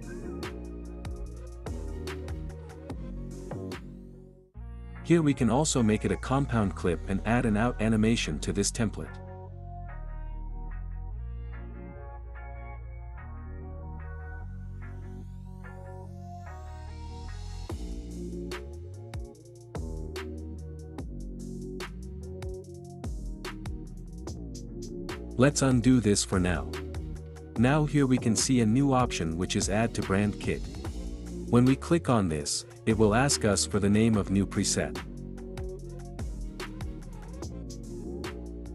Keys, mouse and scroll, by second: 0.9 space, 4.5 space, 6.0 click, 6.3-7.3 right drag, 8.0-9.0 drag, 10.6-11.6 drag, 12.2 click, 13.4 click, 15.5-17.4 drag, 17.6 click, 18.0 space, 22.1 space, 23.2 click, 24.1-25.1 right drag, 26.3-27.3 drag, 32.4-33.4 drag, 34.0 click, 36.5-38.0 typing.